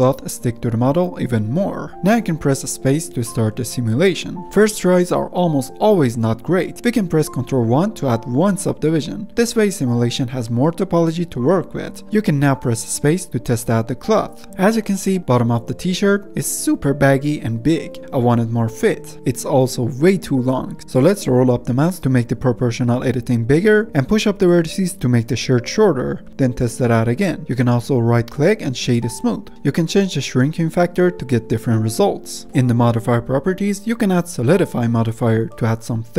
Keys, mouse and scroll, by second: 0.0-1.1 middle drag, 1.1 click, 2.0 space, 6.3 middle click, 6.6 scroll down 1, 6.7-7.1 middle drag, 7.1 click, 7.6 ctrl+1, 8.0-8.5 middle drag, 8.5 scroll down 1, 8.8-9.6 scroll up 3, 8.9-9.3 middle drag, 9.6-12.0 middle drag, 12.0 click, 12.1 space, 14.1-14.4 middle drag, 14.4-15.8 scroll down 1, 15.8-16.4 scroll down 1, 17.1-18.4 scroll down 1, 18.4-19.1 scroll down 1, 19.1 g, 19.4 ctrl+z, 20.1 click, 20.6 g, 24.2 g, 26.7 space, 27.9-29.4 middle drag, 29.4 right click, 29.5-31.4 drag, 31.4 space, 32.4-35.7 middle drag, 35.7 click.